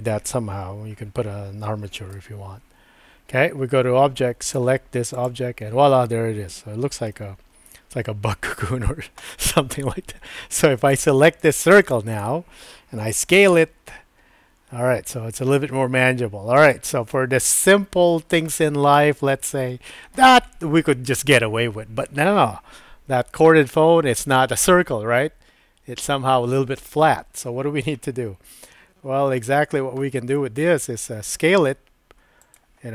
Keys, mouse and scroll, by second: 2.1 Tab, 4.4 click, 7.1-8.5 middle drag, 10.8 click, 11.5 click, 11.8 click, 12.1 click, 13.1 s, 17.1 middle click, 17.7-18.5 scroll down 1, 18.5-20.2 middle drag, 28.7 middle click, 29.3-29.9 scroll down 1, 30.0 shift+middle click, 32.4 click.